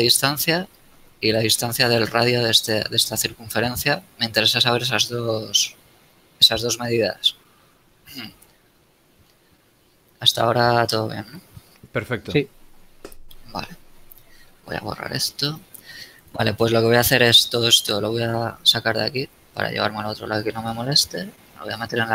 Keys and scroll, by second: 9.6 Escape, 13.8 d, 19.1 a.